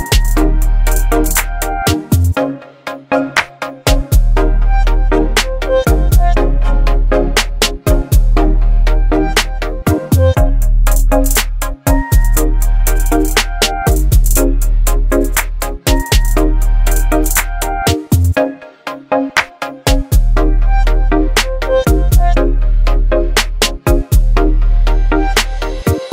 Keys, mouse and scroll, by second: 0.4 click, 1.5 b, 2.6 alt+scroll up 2, 3.3 space, 3.4-4.0 click, 3.8 space, 5.5-6.1 drag, 15.4 v, 15.6 ctrl+0, 18.8 ctrl+0, 18.9 click, 19.8 shift+click, 20.8 ctrl+g, 22.7 click, 23.6-26.1 typing.